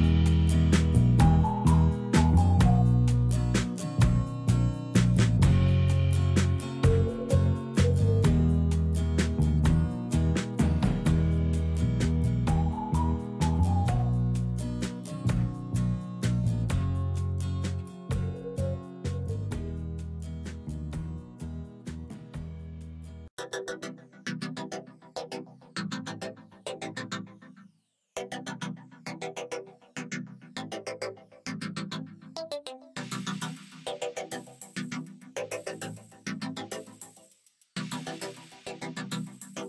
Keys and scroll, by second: 11.6 alt+a.